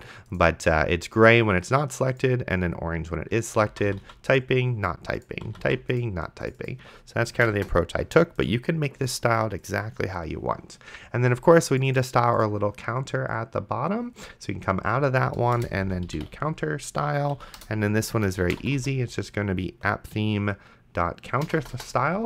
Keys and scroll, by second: 3.8 d, 7.6 BackSpace, 15.6-16.9 typing, 17.3 Down, 17.6 Return, 18.6 p, 21.5 BackSpace.